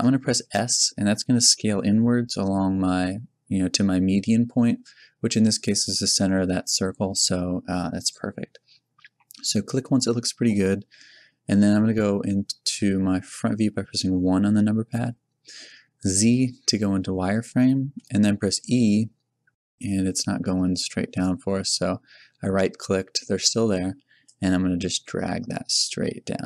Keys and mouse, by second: 0.0 middle click, 1.0 s, 8.1-13.6 drag, 13.6 KP_1, 15.6 z, 18.6 e, 24.3 click.